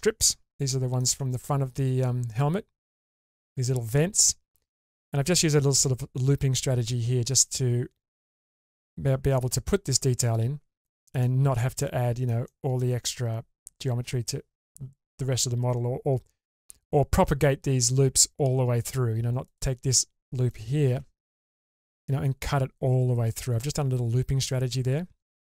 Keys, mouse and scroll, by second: 0.2 alt+middle click, 2.8-3.9 middle drag, 4.6-5.8 scroll up 2, 8.5-9.9 scroll down 1, 10.5-11.1 scroll down 2, 10.8 shift+middle click, 11.2 shift+middle click, 11.8 middle click, 12.5 shift+middle click, 19.0-19.6 scroll up 2, 19.4 click, 20.5 click, 21.0 2, 21.6 click.